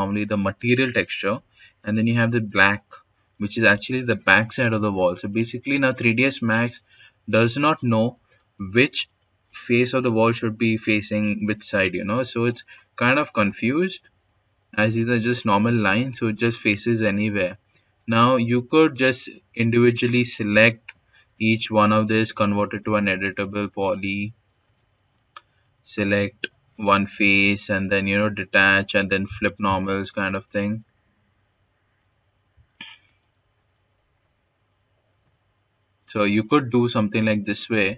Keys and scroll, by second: 19.3 Caps_Lock, 21.6 typing, 24.0-26.8 typing, 32.5-33.5 typing.